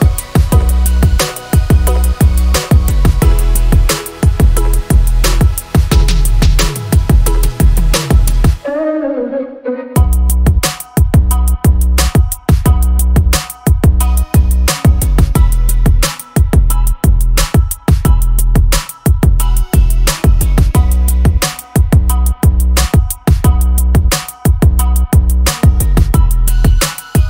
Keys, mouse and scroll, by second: 5.4 middle click, 6.4 middle click, 9.1 middle click, 14.6-16.3 middle drag, 18.4 middle click, 18.8 middle click, 19.8 middle click, 21.5 click, 23.0 click, 23.3 click, 24.3 middle click, 26.9 click.